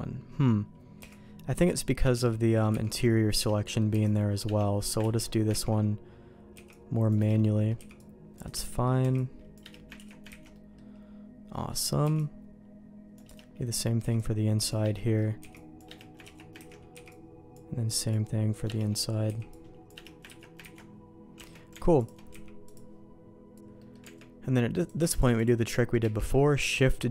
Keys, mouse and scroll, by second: 0.9 c, 2.2 middle click, 2.7 c, 3.5 middle click, 3.9 c, 5.0 ctrl+q, 5.5 ctrl+x, 6.5 c, 7.3 middle click, 7.7 c, 8.5 middle click, 9.0 c, 9.9 ctrl+q, 10.2 ctrl+x, 10.5 middle click, 12.0 c, 13.3 middle click, 14.0 c, 14.9 middle click, 15.3 c, 16.2 ctrl+q, 16.6 ctrl+x, 16.9 c, 18.8 middle click, 18.8 click, 19.2 c, 20.3 ctrl+q, 20.6 ctrl+x, 21.3 Tab, 22.3 x, 23.7 middle click, 24.0 Tab, 24.7 click, 25.1 shift+click, 25.6 shift+middle click, 26.3 shift+g.